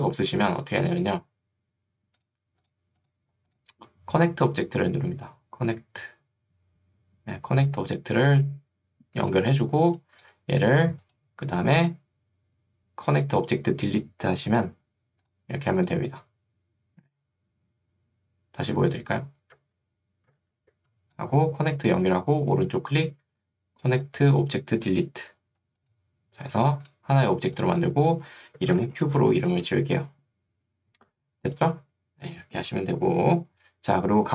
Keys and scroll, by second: 18.9 ctrl+z, 20.5 ctrl+z, 29.1 b.